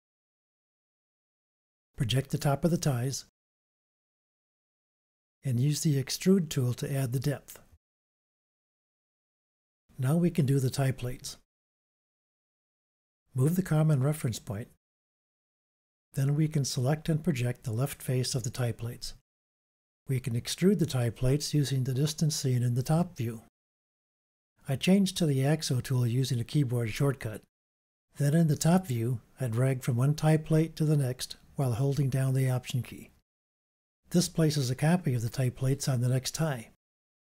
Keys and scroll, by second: 24.4 i, 27.0 u.